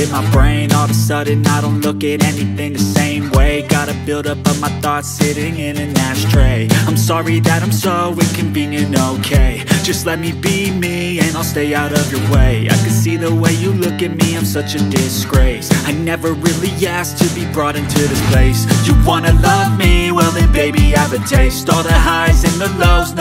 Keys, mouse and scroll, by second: 4.1 click, 8.3-10.8 drag, 12.0 alt+click, 13.3 alt+scroll down 1, 14.2-14.8 alt+scroll up 1, 14.8 scroll down 2, 16.0-16.3 alt+scroll up 1, 17.1 alt+scroll down 1, 18.5-19.0 alt+scroll up 1, 19.3 alt+click, 21.2 alt+scroll down 1, 23.1 alt+scroll up 2.